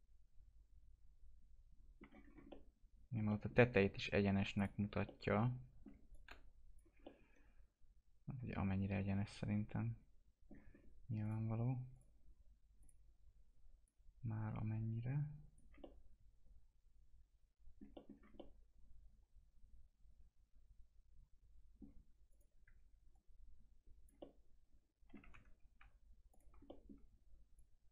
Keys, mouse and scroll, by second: 2.2 scroll up 1, 2.4 alt+middle click, 4.5 click, 5.0 alt+middle click, 6.1 click, 7.0-10.7 alt+middle drag, 10.7 scroll up 1, 11.2-15.8 drag, 15.8-17.9 alt+middle drag, 18.1 scroll down 1, 18.3-22.2 alt+middle drag, 22.2 click, 22.6 w, 23.1 click, 24.1-26.3 alt+middle drag, 25.5 ctrl+z, 26.3 click, 26.6 alt+middle click, 27.5-27.9 drag.